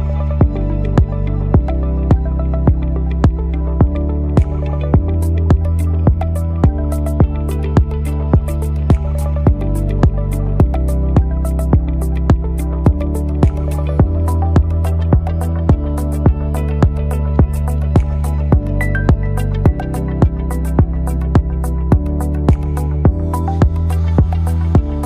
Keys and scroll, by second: 7.2 Left, 7.4 Left, 12.0 Right, 12.1 Right, 12.3 Right, 12.5 Right, 12.6 Right, 12.8 Right, 13.0 Right, 13.1 Right, 13.3 Right, 13.5 Right, 13.7 Right, 14.2 Down, 14.4 Down, 14.6 Down, 15.0 Up, 15.7 Return, 21.8 Down, 22.9 Up, 23.6 Down, 24.6 Down.